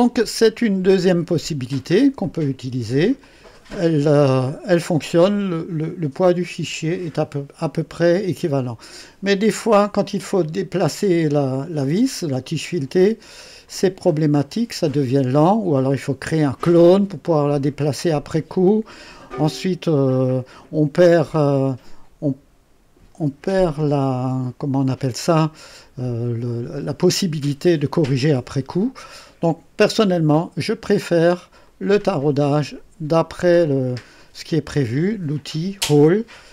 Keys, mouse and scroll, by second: 0.8 click, 1.5-1.8 scroll down 1, 2.2 click, 3.2 click, 11.8 click, 13.6 click, 31.6 click.